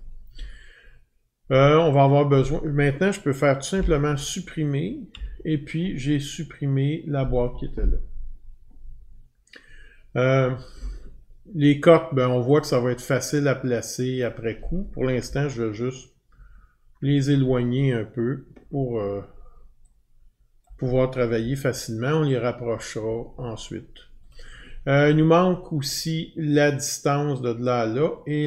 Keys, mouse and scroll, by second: 3.7 Delete, 5.1 Delete, 12.6 click, 14.2 click, 15.2-16.2 Down, 16.2-17.0 scroll down 33, 20.6 click, 21.4-23.0 Left, 24.3 click.